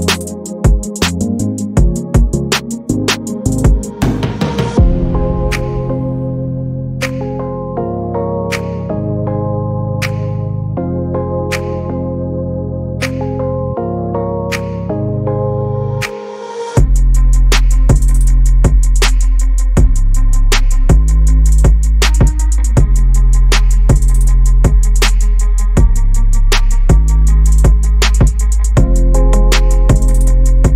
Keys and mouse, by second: 0.0-3.9 typing, 0.0 shift+click, 0.8 click, 1.3 click, 2.7 click, 3.0 click, 3.2 click, 4.1 Tab, 4.2 click, 4.4-4.8 drag, 5.1 shift+click, 5.6 shift+click, 6.1 Tab, 6.3 ctrl+r, 7.0 ctrl+r, 7.4 ctrl+r, 8.1 ctrl+r, 8.3 s, 8.6 Tab, 8.8 shift+drag, 9.3 Tab, 9.5 ctrl+r, 10.1 ctrl+r, 10.7 s, 11.2 Tab, 11.4 Tab, 11.6 Tab, 11.8 click, 12.3 click, 12.7 drag, 12.7 z, 13.0 KP_3, 13.2 KP_1, 13.3-13.7 middle drag, 13.9 KP_7, 14.8 shift+right click, 15.0 shift+a, 17.5 Tab, 17.7 Tab, 17.9 Tab, 18.3 a, 18.6 s, 21.1 click, 21.8 middle click, 22.2 Tab, 22.6 shift+a, 23.9 s, 26.4-27.9 drag, 28.6-29.0 middle drag, 29.7 s.